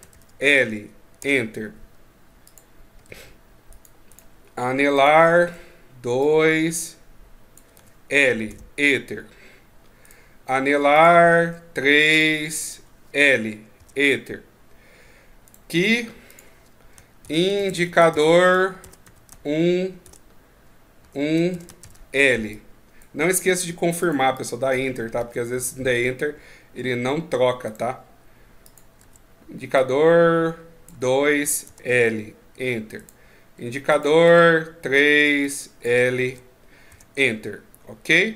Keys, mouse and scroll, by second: 2.2 click, 3.9 right click, 4.7 click, 9.8 right click, 10.7 click, 15.2 right click, 16.0 click, 27.4 right click, 28.4 click, 32.7 right click, 33.6 click.